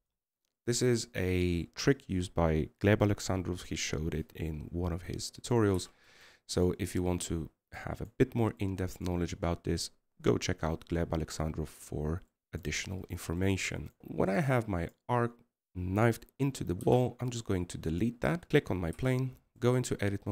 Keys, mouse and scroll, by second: 2.4-5.5 middle drag, 7.2 middle click, 7.5 Tab, 7.9-8.3 middle drag, 8.3 right click, 8.8-13.5 middle drag, 14.0 scroll up 2, 14.1-16.1 middle drag, 16.1 right click, 16.6 right click, 18.5 x, 18.6 right click.